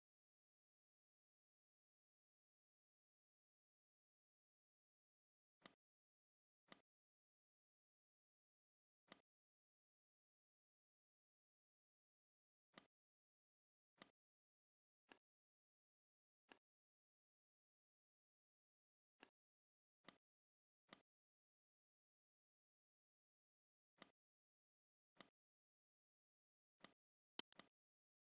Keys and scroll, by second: 1.4 ctrl+z, 19.5 z, 20.7 space, 22.4 v.